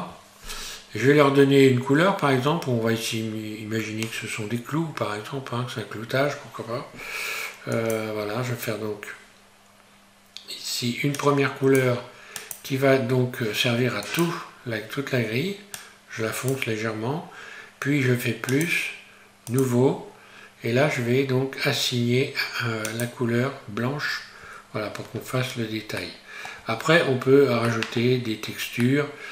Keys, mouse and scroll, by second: 1.0-1.4 scroll down 2, 3.6-4.1 scroll up 2, 7.8 click, 11.2 click, 18.5 click, 22.8 click, 25.3-25.8 scroll down 1, 26.0 middle click, 26.6 Tab, 27.3 Tab, 27.7 middle click, 28.2-28.9 scroll down 1, 28.9 middle click.